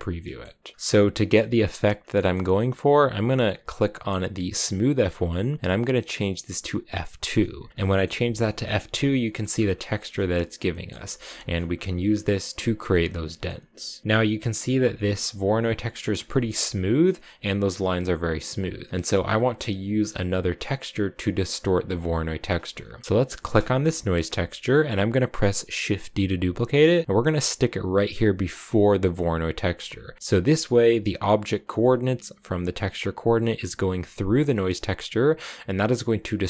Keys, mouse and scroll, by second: 0.0 middle click, 0.9 scroll up 1, 1.0 middle click, 1.8 scroll up 1, 1.9-4.5 middle drag, 4.5-7.3 drag, 7.7 shift+middle click, 7.9 scroll down 1, 7.9 scroll up 1, 8.0-9.0 scroll down 7, 8.3 shift+middle click, 9.0 shift+middle click, 9.4-9.9 scroll down 4, 9.9-11.6 shift+middle drag, 11.6-12.1 scroll down 2, 12.1-12.4 scroll up 1, 12.6-13.1 scroll down 5, 13.1 scroll up 1, 13.1 middle click, 13.6 scroll down 1, 13.6 middle click, 14.0-14.6 scroll up 2, 14.6 scroll up 1, 14.7-15.9 shift+middle drag, 15.9 scroll down 2, 16.1-18.9 shift+middle drag, 23.4 click, 26.0 shift+d, 29.4 click, 30.0 middle click, 30.1-31.4 scroll up 3, 34.6-36.4 drag.